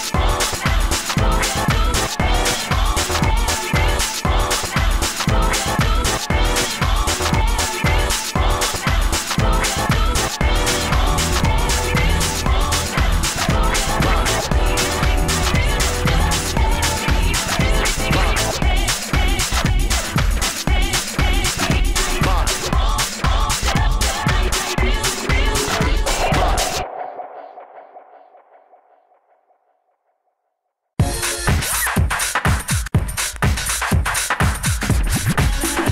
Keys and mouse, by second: 1.6 s, 3.1 f, 4.4 f, 5.3 s, 7.3 s, 11.9 s, 15.0 s, 15.1-16.1 drag, 17.6 s, 18.1-19.2 drag, 19.4 f, 19.8 f, 19.9 click, 20.2 f, 20.9 s, 23.0 f, 23.8 s, 24.0 f, 25.8-29.1 typing, 31.7 s, 31.7 f, 32.1-33.5 drag, 33.5 f, 33.7 s, 35.1 s.